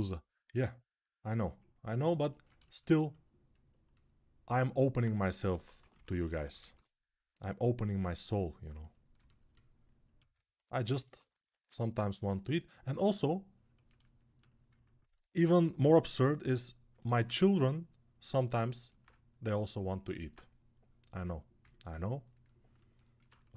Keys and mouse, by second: 5.2-6.5 typing, 10.0-14.5 alt+shift+right drag, 10.8 1, 11.4 [, 11.9 [, 12.0 [, 14.8-18.9 alt+right drag, 21.4-23.5 alt+right drag.